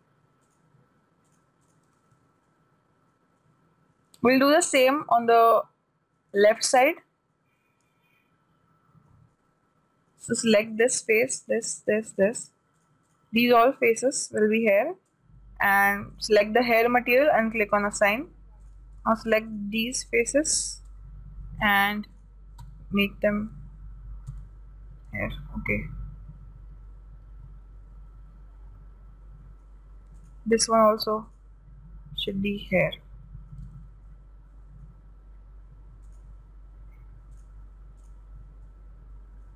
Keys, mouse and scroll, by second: 0.9 right click, 1.7-3.8 drag, 2.5 a, 2.9-5.9 middle drag, 10.0-11.6 middle drag, 11.2-16.4 right drag, 14.5 shift+b, 16.6-20.0 drag, 18.6 a, 19.1-22.9 right drag, 22.0-24.5 drag, 23.1 a, 24.9 a, 25.8-27.7 middle drag, 30.6-33.5 right drag, 32.7-35.0 drag, 33.5-36.4 middle drag, 34.1 a, 36.6 right click, 37.8-39.5 drag, 39.1-39.5 middle drag.